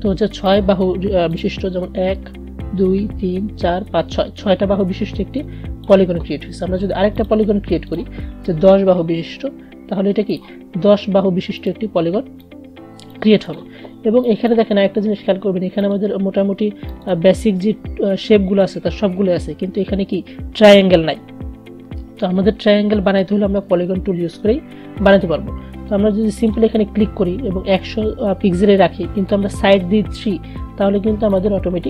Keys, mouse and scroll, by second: 5.0-7.2 drag, 10.5 click, 17.1 right click, 25.1 click, 29.3 click.